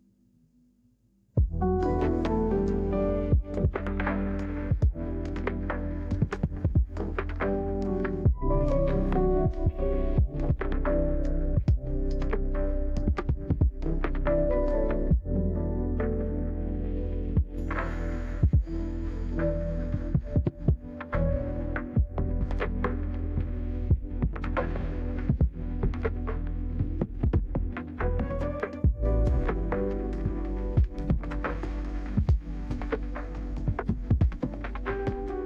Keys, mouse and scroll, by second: 0.7 1, 1.0 0, 6.4 click, 8.7 middle click, 9.8 click, 15.8-16.6 scroll down 2, 19.4 click, 20.4 d, 20.9 click, 21.2 click, 22.3-23.4 typing, 25.3 right click, 26.3 middle click, 30.2 click, 30.8 click, 31.8 click, 32.3 right click, 35.1 click.